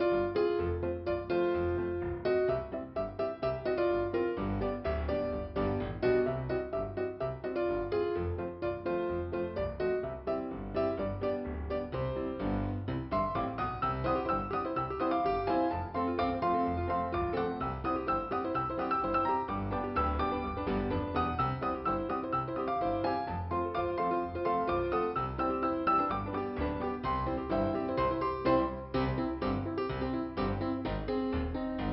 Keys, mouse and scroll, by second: 0.7 scroll down 2, 5.4 scroll up 3, 6.4 right click, 7.2 scroll down 2, 7.2 scroll up 1, 9.5 scroll down 2, 15.7 scroll up 2, 17.7-18.9 scroll up 2, 19.7-20.5 scroll down 2, 22.7 scroll up 2, 23.7-24.2 scroll down 2, 25.7-27.2 scroll up 2, 27.2-27.6 scroll down 1, 30.5-31.7 scroll up 2.